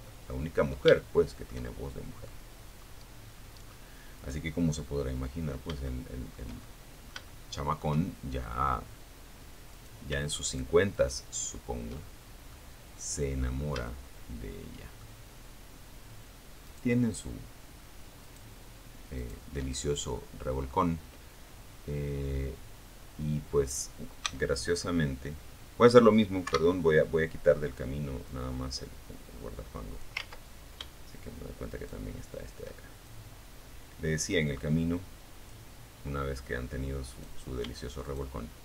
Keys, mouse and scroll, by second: 0.9-1.3 scroll up 2, 2.4 click, 2.9 middle click, 4.1 shift+middle click, 4.8-6.1 shift+middle drag, 6.7-7.1 scroll up 2, 7.9 right click, 8.7 shift+right click, 9.1 shift+right click, 10.2 shift+middle click, 12.1-13.3 shift+middle drag, 14.8 shift+right click, 16.4 shift+right click, 17.3 shift+right click, 17.9 scroll down 3, 18.3 click, 22.4 c, 22.9 click, 24.6 Escape, 26.5-28.4 drag, 28.4 ctrl+z, 28.9 ctrl+shift+z, 29.9 shift+right click, 31.2-33.8 shift+drag, 35.3 right click, 36.2 shift+right click, 36.9 shift+right click, 38.5 shift+right click.